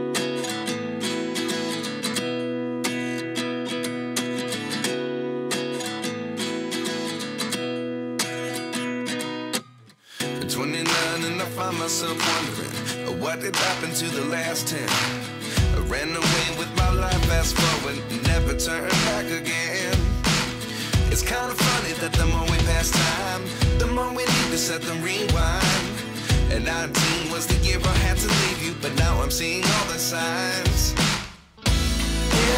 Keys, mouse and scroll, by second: 0.0 click, 1.3 click, 1.8 g, 2.0 middle click, 6.1 Tab, 9.5 click, 10.3 shift+click, 11.9 click, 12.1 g, 12.5 middle click, 13.3 click, 14.1 click, 14.4 e, 15.4 click, 15.7 click, 15.8 g, 16.1 middle click, 16.4 click, 16.5 g, 16.8 middle click, 17.3 click, 17.4 g, 17.6 middle click, 19.0 click, 20.2 g, 20.7 middle click, 21.1 click.